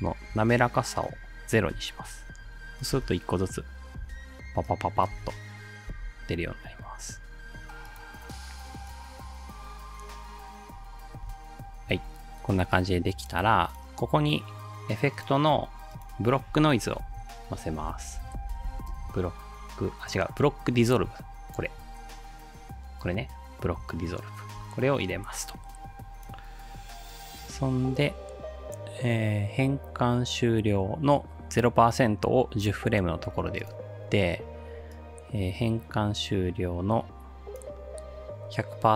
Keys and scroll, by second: 3.0 ctrl+alt+space, 4.0 space, 5.2 space, 11.2 space, 11.9 space, 17.0-19.2 typing, 21.1-21.8 typing.